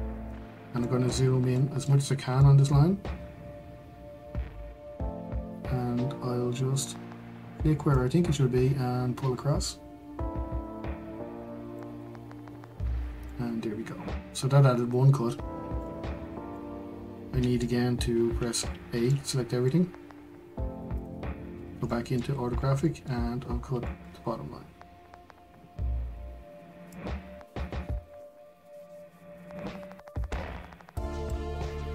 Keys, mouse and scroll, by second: 0.4-0.8 scroll up 1, 0.8 shift+middle click, 1.1 scroll up 1, 1.6 shift+middle click, 2.0-2.4 scroll up 1, 2.4-8.0 shift+middle drag, 8.0 click, 12.7 scroll down 1, 13.2-16.0 middle drag, 16.0-16.5 scroll down 2, 16.5-18.5 middle drag, 18.5 a, 19.1-21.0 middle drag, 21.0 click, 21.5-21.8 scroll up 1, 21.8 shift+middle click, 22.2-22.8 scroll up 4, 22.8 shift+middle click, 23.2-23.8 scroll up 1, 23.8-26.9 shift+middle drag, 26.9 click.